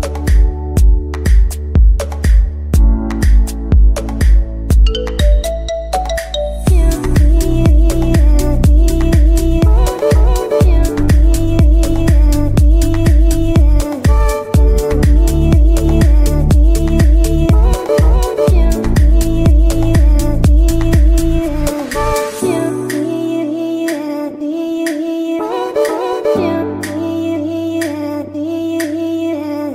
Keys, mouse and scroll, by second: 3.0-4.5 shift+middle drag, 4.5 click, 9.5-10.6 drag, 15.8-17.1 shift+middle drag, 17.1 scroll up 1, 19.7 click.